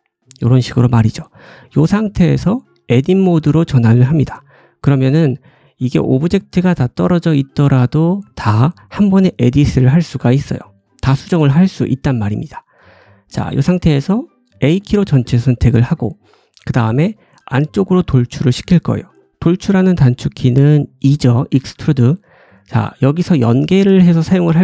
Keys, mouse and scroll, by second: 2.0 middle click, 2.9-11.0 drag, 4.6 middle click, 10.5 g, 11.0-13.2 ctrl+middle drag, 11.4 ctrl+z, 13.2 scroll up 1, 14.0 middle click, 14.6 a, 15.3 middle click, 15.9 scroll down 1.